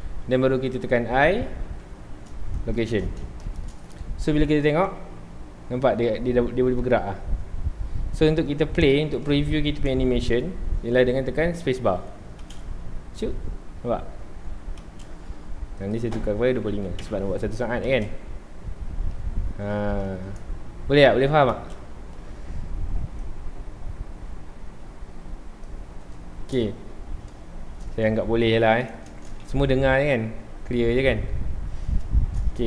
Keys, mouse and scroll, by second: 1.1 i, 3.4-4.9 shift+middle drag, 4.9-9.5 drag, 9.5-9.9 shift+middle drag, 9.9-10.4 scroll up 1, 10.4-10.8 shift+middle drag, 10.8 scroll down 1, 11.0 middle click, 11.9 scroll down 1, 12.4 space, 12.5 space, 14.8 space, 15.8-17.0 drag, 17.0 KP_Enter, 17.8 space, 18.0 space, 19.1-19.8 scroll up 2, 21.5 space, 23.2-26.3 drag, 26.3-31.3 shift+middle drag, 31.3 Tab, 31.6 scroll down 2, 31.8-32.6 middle drag, 32.6 ctrl+s.